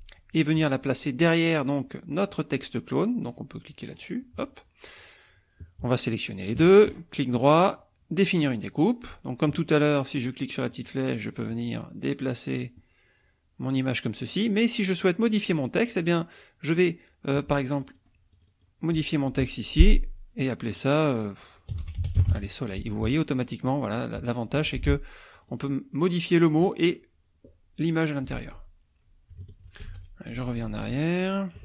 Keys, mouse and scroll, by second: 3.9 click, 6.3 shift+click, 6.9 shift+right click, 8.3 click, 10.7 click, 11.3 click, 12.6-14.5 drag, 15.9 click, 17.8 click, 18.3 click, 21.5-22.8 typing, 24.5 F1, 25.3 click, 28.3 ctrl+z, 29.9 ctrl+shift+z.